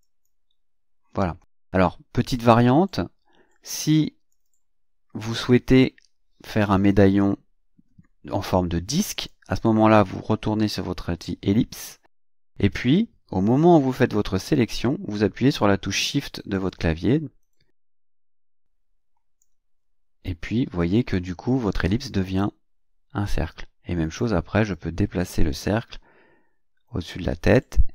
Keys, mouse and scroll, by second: 0.0 click, 4.3 click, 9.1 click, 12.2 click, 16.7-19.6 shift+drag, 24.0 click, 24.7-27.7 drag.